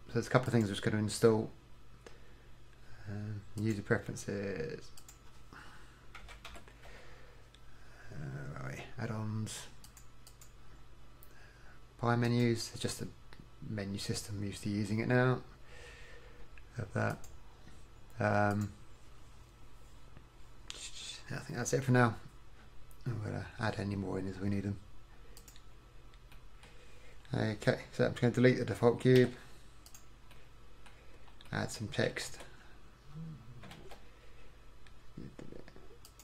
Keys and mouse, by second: 0.6-2.5 drag, 27.2-29.2 middle drag, 29.2 x, 30.4 middle click, 32.3 shift+a, 33.8 shift+a.